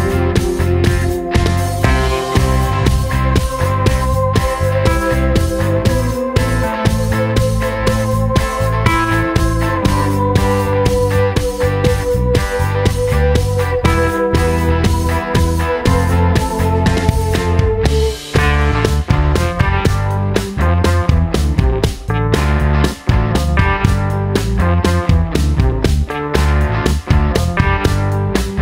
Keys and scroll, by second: 2.7 d, 11.7 d, 25.5-27.7 typing.